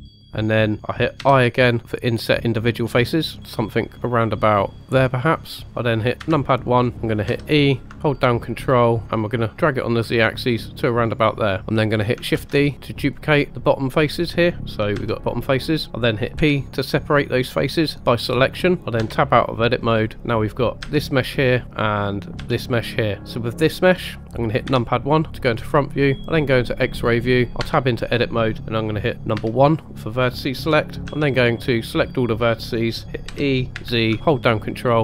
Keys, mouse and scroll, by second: 1.2 i, 4.8 click, 6.2 KP_1, 6.9 shift+middle click, 7.3 e, 9.6 ctrl+click, 12.3 shift+d, 13.0 right click, 13.5 middle click, 14.9 g, 15.5 right click, 16.4 p, 18.8 middle click, 19.0 Tab, 20.0 click, 20.8 g, 21.3 right click, 22.3 click, 22.4 g, 23.2 right click, 24.6 KP_1, 25.5 scroll up 2, 26.6 click, 27.6 Tab, 29.3 1, 31.0 a, 33.3 e, 33.7 z.